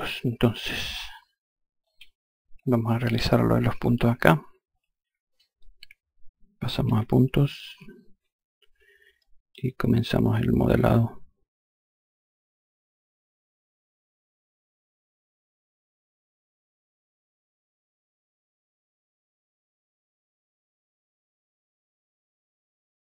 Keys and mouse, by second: 0.2 F1, 1.3 F2, 8.3 5, 8.7 click, 10.0 click, 12.1 click, 12.8 click, 14.9 click, 15.9 click, 17.1 click, 17.8 click, 18.7 ctrl+click, 19.4 click, 20.3 ctrl+click, 20.9 click.